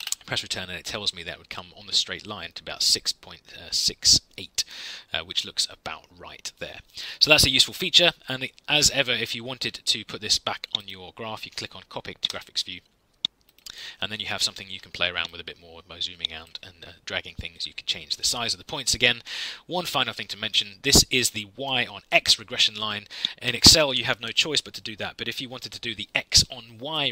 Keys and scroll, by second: 0.0 Return.